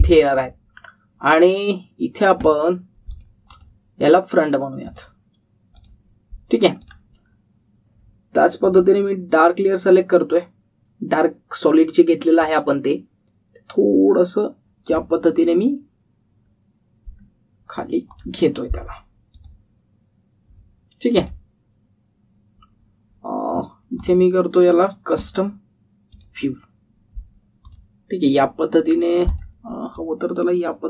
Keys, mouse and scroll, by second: 0.5-1.3 scroll down 1, 1.3 click, 1.7-3.5 scroll down 1, 4.0 click, 8.1-8.7 scroll up 1, 9.6 click, 13.3-16.1 click, 17.4-18.9 scroll down 1, 19.0 click, 22.7-24.0 scroll up 1, 24.9 click, 29.1-29.8 scroll up 1, 30.3-30.8 drag.